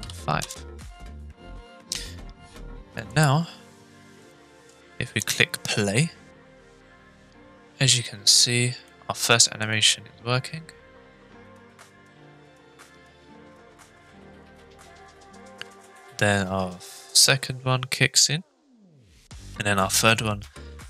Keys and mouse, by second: 2.9 click, 4.3-4.7 shift+middle drag, 5.1 space, 8.9-9.6 middle drag.